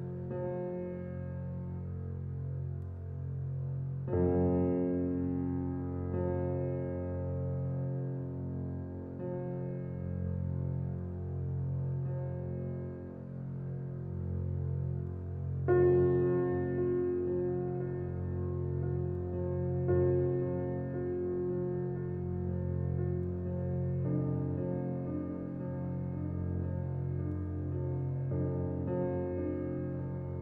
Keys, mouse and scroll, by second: 0.1-0.4 alt+middle drag, 0.4 scroll down 4, 0.7-1.2 shift+middle drag, 1.2 alt+z, 1.7 s, 3.4-4.3 middle drag, 4.3 s, 6.6 g, 7.8 click, 8.2-9.5 middle drag, 9.5 alt+scroll up 1, 10.2 scroll up 1, 11.0 click, 11.4 s, 13.4-13.9 middle drag, 13.9 scroll down 2, 14.1 click, 14.6-15.8 middle drag, 15.8 click, 16.6 g, 17.5-18.1 scroll down 3, 17.7 click, 18.2-18.9 middle drag, 18.9 click, 19.2 shift+click, 20.3 ctrl+j, 21.2 click, 21.5 scroll down 1, 21.8-23.7 middle drag, 24.0 alt+middle drag, 24.7 click, 24.9 scroll up 2, 25.5 shift+middle drag, 25.6 shift+scroll up 1, 26.1 Tab, 26.9 alt+z, 27.3 click, 28.1 middle click, 29.0 s.